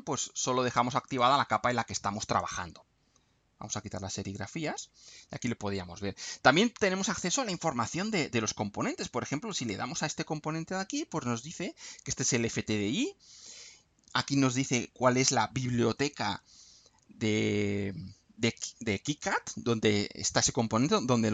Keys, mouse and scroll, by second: 1.0 click, 1.6 click, 2.4 click, 4.2 click, 5.4-5.8 scroll up 1, 6.2 scroll down 1, 7.2-8.1 scroll down 4, 9.5 click, 20.9 click.